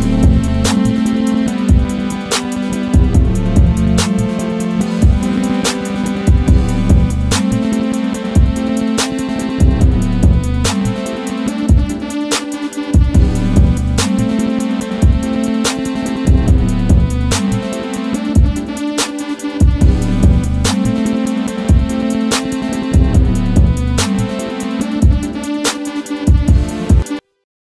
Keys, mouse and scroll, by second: 0.8-2.1 drag, 2.1-4.4 drag, 4.4 scroll down 1, 4.8 click, 5.9 right click, 6.7 click, 7.9 scroll up 1, 8.5-12.6 drag, 12.6-14.4 drag, 14.7 scroll down 1, 18.0 scroll down 1, 18.4 click, 19.7 scroll up 1, 20.6-22.6 drag, 24.8-25.1 scroll down 1, 25.4 click, 26.2 F4.